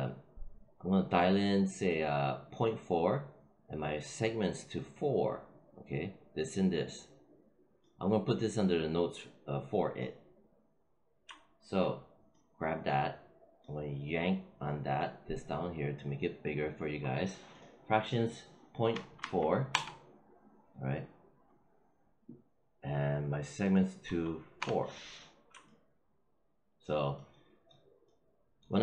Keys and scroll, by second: 18.8 ., 19.1 4, 19.6 Return, 23.9 4, 24.5 Return.